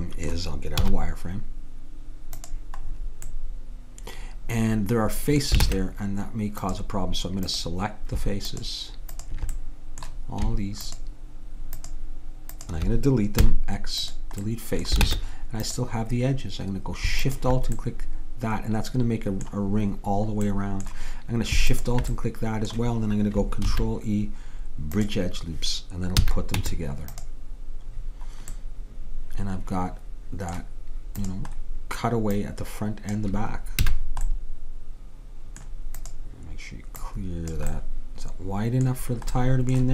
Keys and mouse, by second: 0.8 z, 3.4 middle click, 5.7 ctrl+Tab, 7.5-14.5 drag, 13.5 x, 15.1 ctrl+Tab, 17.3-19.2 drag, 20.5-22.2 middle drag, 21.8-23.7 drag, 23.7 ctrl+e, 26.3 a, 26.6 Tab, 28.7-30.2 middle drag, 31.3-34.3 drag, 33.9 a, 36.0-38.8 drag, 37.8-39.5 middle drag.